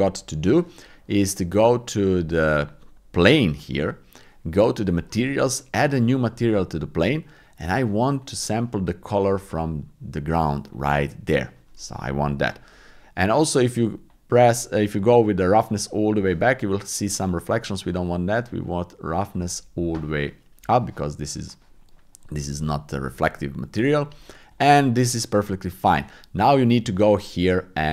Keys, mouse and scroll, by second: 1.5 click, 4.9 click, 5.9 click, 8.2 click, 10.6 click, 13.3 click, 15.4 click, 18.2-19.4 drag, 24.5 click, 26.9 click.